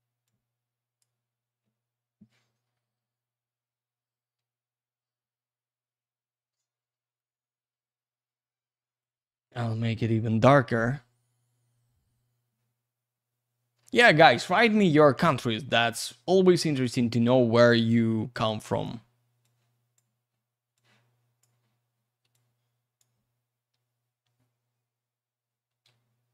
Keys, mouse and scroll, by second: 0.2 click, 3.3 scroll up 1, 4.6-6.3 scroll down 1, 7.0 click, 8.8 click, 12.9-14.6 scroll up 1, 14.6-15.8 scroll down 1, 15.8-17.1 scroll up 1, 17.1 scroll up 1, 17.7 click, 18.7 click, 19.4 click, 20.7 click, 22.0 q, 22.3 alt+click.